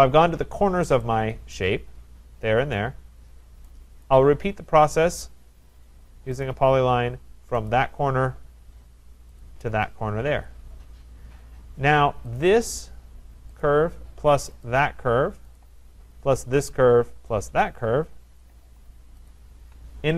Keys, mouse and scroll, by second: 0.5-1.5 scroll, 1.5 right click, 3.3-4.1 scroll, 4.1 right click, 4.3-5.2 scroll, 6.5 click, 7.7 click, 9.4 click, 10.3 Return, 12.4 click, 13.6 click, 14.7 shift+click, 15.6 click, 17.4 click, 17.7 click, 19.0 click, 19.3 shift+click, 19.9-20.1 scroll.